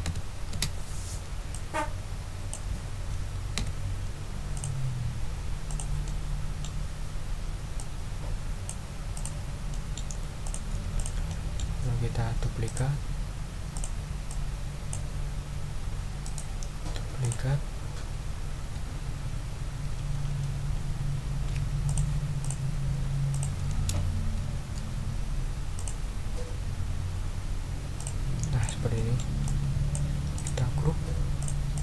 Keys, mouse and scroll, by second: 0.5 Return, 1.5-2.7 drag, 2.8 ctrl+scroll up 2, 3.5 ctrl+d, 4.5 click, 5.7 click, 6.0 click, 7.8-8.8 drag, 9.1 click, 9.7 click, 10.0 middle click, 10.4 click, 10.9 click, 11.3-11.8 ctrl+middle drag, 12.6 ctrl+right click, 13.7 click, 14.3 ctrl+click, 16.2 ctrl+right click, 17.2 click, 20.0 shift+Left, 21.8 shift+click, 22.4 shift+click, 23.3 shift+click, 24.3 ctrl+shift+a, 25.7 click, 28.0 click, 28.6 click, 28.9 middle click, 29.4 click, 30.3 right click, 31.4 click, 31.7 click.